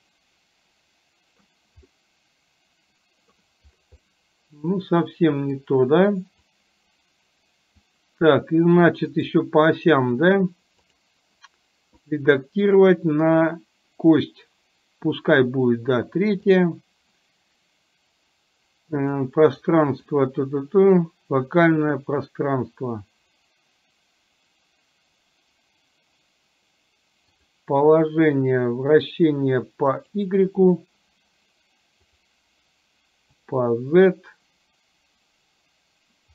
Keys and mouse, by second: 0.0-1.5 middle drag, 2.1-3.5 middle drag, 4.1-5.7 middle drag, 6.7-8.0 drag, 9.2-36.3 right drag.